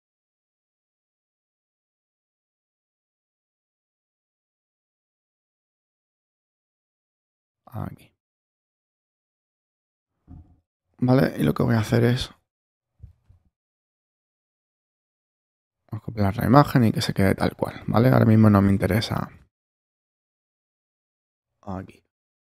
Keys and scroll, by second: 11.6 shift+super+e, 19.1 space, 19.8 super+space, 20.2 super+-, 21.2 super+0.